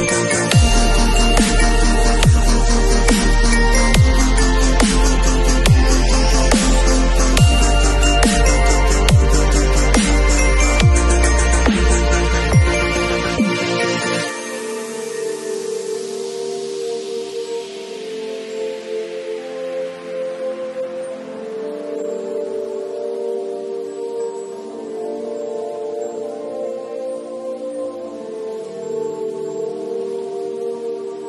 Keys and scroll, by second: 13.3 space, 29.6 b.